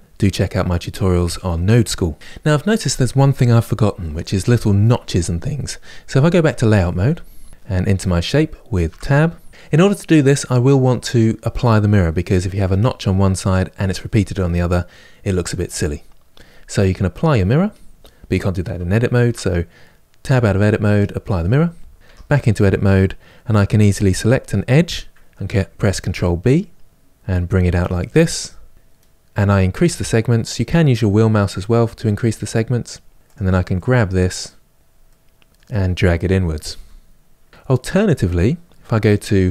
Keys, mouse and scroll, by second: 2.1 click, 6.3 click, 7.1-8.6 middle drag, 8.6 Tab, 20.7 click, 21.9 Tab, 22.2-23.9 middle drag, 23.9 click, 25.7 ctrl+b, 30.4-32.4 drag, 32.4-33.1 scroll up 2, 33.1 click, 33.5-36.5 middle drag, 36.5 g, 37.5-38.8 scroll up 1, 38.8-39.5 scroll up 1.